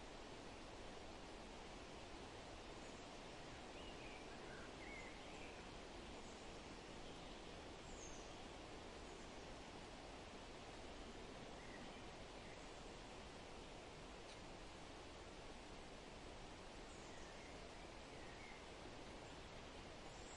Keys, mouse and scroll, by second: 1.2 click, 10.1 click, 14.6 Tab, 16.3-16.9 scroll up 3, 18.7 Tab, 19.9 Tab.